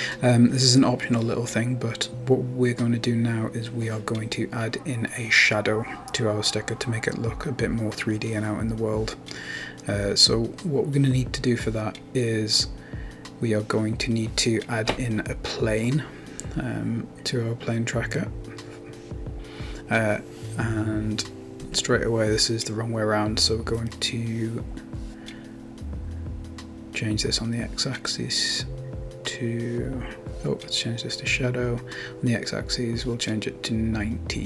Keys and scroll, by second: 19.6 Return, 20.3-22.4 typing, 25.9 Return, 26.2-28.3 typing, 29.9-30.9 typing, 32.1 Left, 32.3-33.2 typing.